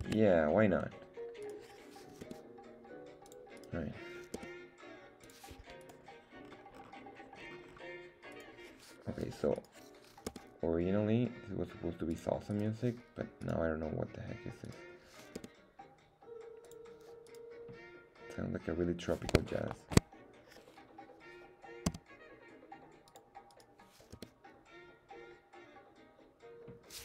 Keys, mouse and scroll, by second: 0.0 Tab, 1.4 right click, 2.2 g, 3.2 click, 3.6 right click, 4.3 g, 5.3 click, 5.8 click, 5.8 right click, 6.4 scroll up 2, 7.4 scroll up 1, 7.4 scroll down 2, 8.2 scroll down 1, 8.3 right click, 9.5 right click, 10.3 g, 12.1 click, 12.5 right click, 13.4 right click, 14.6 click, 14.6 right click, 15.4 g, 16.6 click, 17.3 right click, 19.7 shift+middle click, 21.9 s, 23.1 click, 23.5 right click, 24.1 g, 26.9 click.